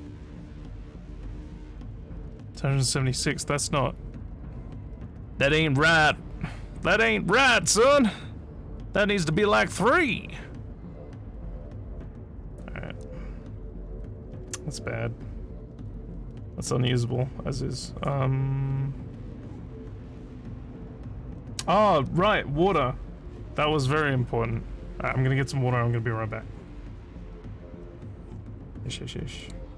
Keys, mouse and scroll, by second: 9.9 click, 29.4 click.